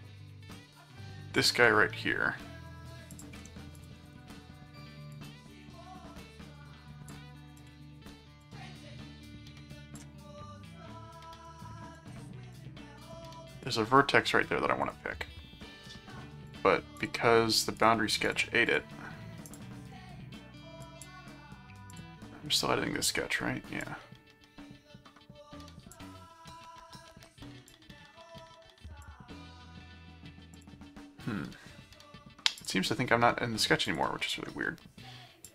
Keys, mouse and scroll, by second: 1.4 click, 3.1 click, 3.8 alt+click, 4.0 alt+c, 5.1-7.1 drag, 7.5 click, 8.4-9.9 drag, 11.4 right click, 12.0 click, 12.5-14.0 drag, 14.8 click, 16.5 click, 17.8 right click, 18.3 click, 19.5 click, 20.8 click, 21.9 click, 23.8-25.9 drag, 27.7 click, 30.5 click, 32.6 click, 33.9 click, 35.4 click.